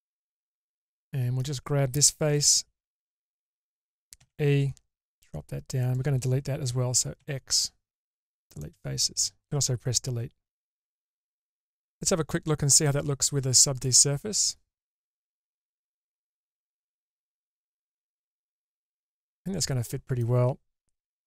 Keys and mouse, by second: 0.6 middle click, 2.6 3, 3.4 click, 4.4 e, 7.3 x, 8.8-11.5 middle drag, 12.5 Tab, 13.4 Tab, 14.4-15.6 drag, 17.1-18.3 drag, 18.9-20.3 middle drag.